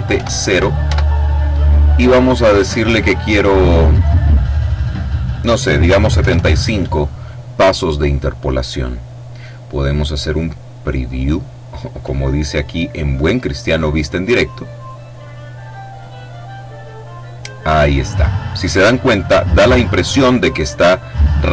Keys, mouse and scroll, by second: 0.5 Tab, 5.7 KP_7, 5.9 KP_5, 14.3 click.